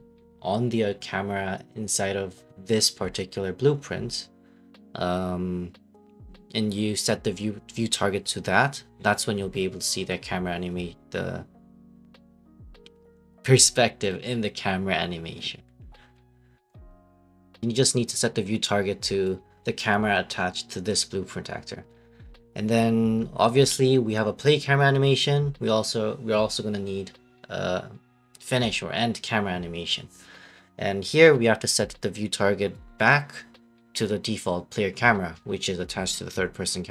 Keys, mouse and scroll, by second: 0.1 click, 1.2 click, 1.4 right click, 2.6 click, 3.2 right click, 3.9 right click, 5.5 click, 6.4 click, 8.0 click, 8.7 click, 9.0 right click, 9.6 k, 11.9 F8, 12.5 typing, 13.0 right click, 16.8 click, 17.7 right click, 18.8 click, 19.4 right click, 20.9 click, 22.3 right click, 22.8 right click, 23.3-28.5 typing, 29.2 right click, 29.9 click, 30.1 middle click, 30.5 right click, 31.1 right click, 31.5 click, 31.8 right click, 32.0 ctrl+c, 32.2 ctrl+v, 34.4 click, 34.6 scroll, 35.3 click, 36.3 Delete.